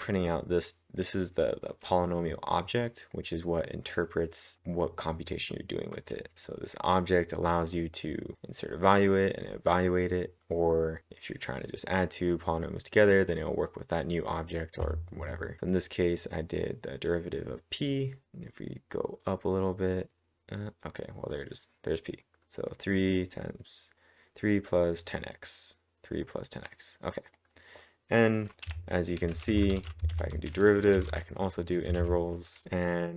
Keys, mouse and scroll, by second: 1.0-4.6 drag, 6.6 click, 6.7-9.5 drag, 9.1-9.8 typing, 10.4-12.5 drag, 12.1-12.9 typing, 15.3-17.5 typing, 15.6 click, 15.7-18.2 drag, 18.2 scroll up 1, 19.1-19.7 scroll down 1, 20.0-21.4 scroll up 1, 25.4-26.2 scroll down 2, 26.2 scroll down 1, 27.3 click, 28.6-30.6 typing, 30.3 click, 31.7-33.1 typing, 32.1 click.